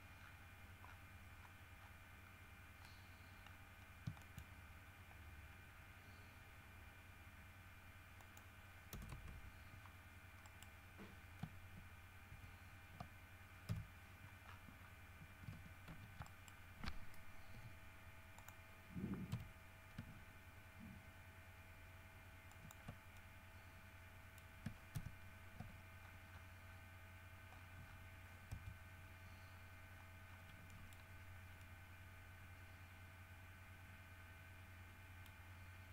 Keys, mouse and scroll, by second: 0.4 scroll down 2, 1.0 scroll down 2, 1.6-2.2 scroll up 2, 2.4 scroll down 1, 3.6-4.8 scroll up 6, 4.4 shift+middle click, 8.4 middle click, 9.1 KP_0, 9.2 KP_Enter, 10.6 middle click, 12.4 ctrl+KP_1, 13.8 KP_7, 14.6-15.2 scroll down 4, 16.0 shift+d, 16.4 shift+right click, 17.7 ., 18.5 click, 19.5 r, 22.6 ctrl+click, 23.3-24.7 ctrl+middle drag, 25.1 ctrl+KP_1, 26.2-27.1 ctrl+scroll up 7, 27.7-28.3 scroll down 4, 28.7 KP_3, 29.6 scroll down 2, 30.1-30.7 scroll up 4, 30.8 middle click, 31.8-32.8 middle drag, 35.1 middle click.